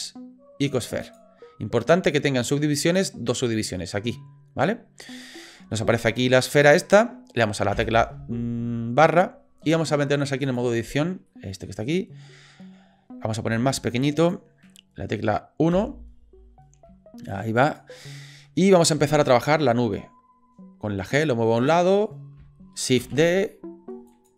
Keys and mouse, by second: 6.4 click, 7.9 KP_Divide, 10.6 click, 11.4 middle click, 13.5 s, 15.7 KP_1, 16.8 s, 18.9 g, 23.0 shift+d.